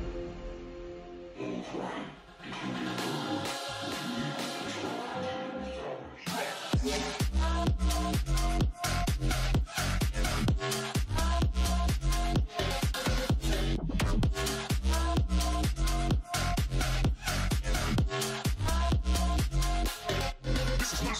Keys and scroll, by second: 0.7-1.9 typing.